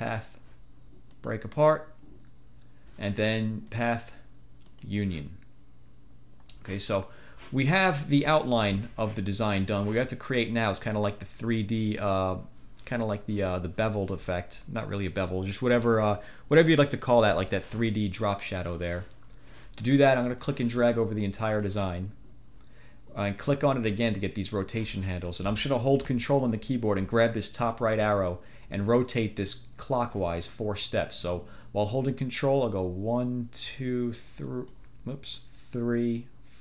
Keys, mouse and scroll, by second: 0.0 click, 1.3 click, 3.8 click, 4.8 click, 9.8 click, 18.7 click, 20.6-21.7 drag, 32.1-35.0 drag, 35.4-36.6 drag.